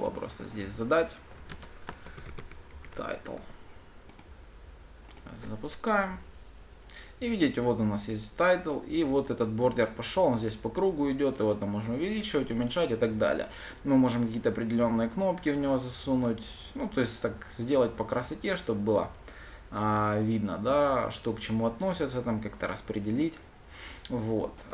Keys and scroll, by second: 5.7 ctrl+shift+F10.